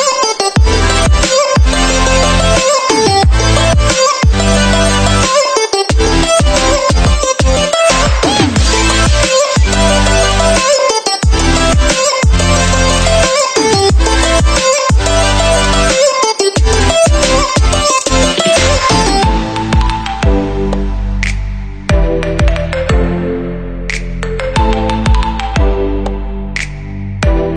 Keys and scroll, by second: 0.0 ctrl+0.